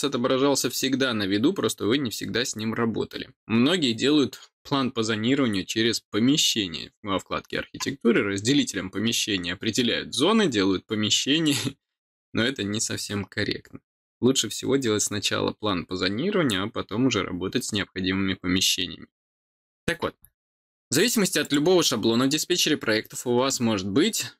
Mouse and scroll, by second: 21.4 click.